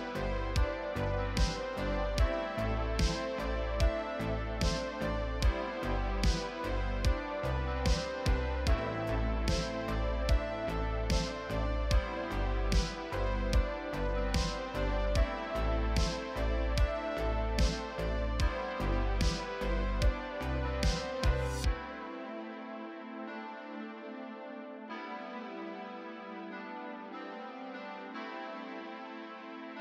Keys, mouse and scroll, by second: 0.0 KP_3, 0.2 scroll down 1, 0.3-0.6 scroll up 2, 0.4 shift+middle click, 0.6 shift+middle click, 0.7 scroll down 1, 0.8 shift+middle click, 0.8 scroll up 1, 0.9 middle click, 0.9-1.8 scroll down 4, 1.8 middle click, 1.8 Tab, 1.9 middle click, 2.0 click, 2.2 KP_1, 2.2 scroll up 2, 2.3 shift+middle click, 2.6 click, 2.7 scroll down 1, 3.3 scroll up 1, 3.6 shift+middle click, 3.6 scroll down 2, 4.0 shift+middle click, 4.0 shift+d, 5.3 KP_3, 5.7 r, 5.8 KP_3, 6.0 g, 6.3 scroll down 3, 6.4 scroll up 2, 6.8 Tab, 6.8 middle click, 6.9 scroll up 1, 7.1-8.0 typing, 7.4 Tab, 7.4 middle click, 7.5 scroll down 2, 7.6 Tab, 7.8 shift+click, 7.8 middle click, 8.7 Tab, 8.7 middle click, 9.2 click, 9.2 shift+middle click, 10.1 click, 10.5 middle click, 10.7 ctrl+a, 11.0 scroll down 4, 11.0 middle click, 11.1 scroll up 2, 11.2 middle click, 11.4 scroll down 2, 11.4 middle click, 11.5 scroll up 3, 11.6 KP_1, 11.8 click, 12.3 scroll down 3, 12.3 alt+a, 12.3 middle click, 12.6 middle click, 12.7-13.0 scroll up 2, 12.7 middle click, 13.0 KP_1, 13.1 shift+d, 13.2 right click, 13.5 shift+middle click, 13.5 scroll up 3, 16.6 shift+middle click, 16.7 r, 17.0 middle click, 17.2 KP_3, 17.5-17.8 scroll down 1, 17.8 middle click, 18.0 a, 18.0 middle click, 18.1 KP_7, 18.3 scroll up 1, 18.3 scroll down 2, 18.3-20.0 scroll up 1, 20.0-26.5 typing, 20.2 click, 20.7 middle click, 21.3 alt+click, 21.3 middle click, 21.4 scroll up 1, 21.7 middle click, 22.1 middle click, 22.1 scroll up 1, 22.2 ctrl+r, 22.4 ctrl+r, 22.6 Tab, 22.7 middle click, 22.9 middle click, 22.9 Tab, 23.1 middle click, 23.2 alt+a, 23.2 middle click, 23.2 scroll down 1, 23.3 middle click, 23.3-23.7 scroll up 6, 23.4 click, 23.5 middle click, 24.4 Tab, 24.4 middle click, 24.5 alt+a, 24.5 shift+middle click, 24.7 scroll down 4, 24.7 shift+middle click, 24.8-25.2 scroll up 5, 24.9 middle click, 25.3 middle click, 25.4 alt+a, 25.4 middle click, 25.5 shift+middle click, 25.9 middle click, 26.3-26.7 scroll up 5, 26.6 shift+middle click, 26.7 scroll down 5, 26.8 shift+middle click, 26.8 scroll up 2, 27.0 shift+middle click, 27.1 scroll down 1, 27.2 shift+middle click, 27.3 scroll up 1, 27.3 scroll down 1, 27.4 middle click, 27.5 alt+a, 27.6 middle click, 27.6 ctrl+s, 27.7 scroll up 1, 27.7 click, 27.8 KP_1, 28.0 shift+middle click, 28.6 scroll down 1, 28.7 scroll up 10, 28.9 shift+middle click, 29.0 scroll down 4, 29.3 alt+a, 29.3 shift+middle click, 29.5 z, 29.6 shift+middle click.